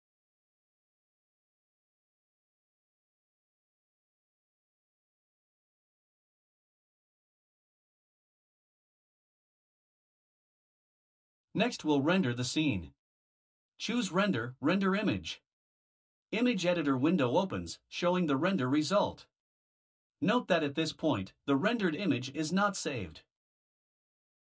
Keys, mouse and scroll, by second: 0.0-2.2 typing, 3.7 click, 4.1 Return, 4.6-7.2 typing, 8.8 click, 9.8-11.1 typing, 11.7 Return, 14.8 click.